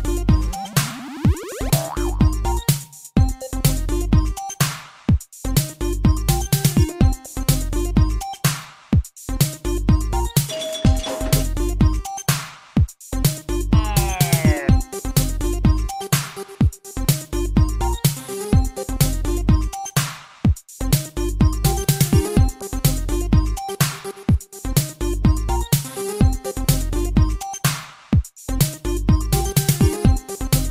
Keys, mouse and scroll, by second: 0.8 click, 2.0 click, 9.4 click, 10.5 r, 11.4 click, 11.5 click, 12.5 click, 14.4 r, 15.0 click, 15.1 click, 16.0 click, 22.7 r, 23.8 click, 23.9 click, 24.8 click, 29.4 r, 30.3 click, 30.4 click.